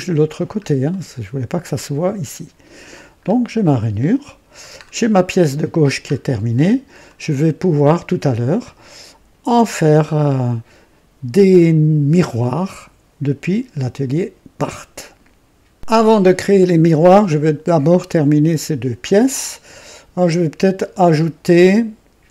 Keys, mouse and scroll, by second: 0.3 scroll down 1, 0.9 right click, 1.6-3.0 drag, 3.2-3.5 scroll up 1, 3.9-4.7 drag, 4.0 typing, 4.8 scroll down 1, 5.8 scroll down 1, 7.1-7.7 right drag, 7.8-9.9 drag, 15.7 click.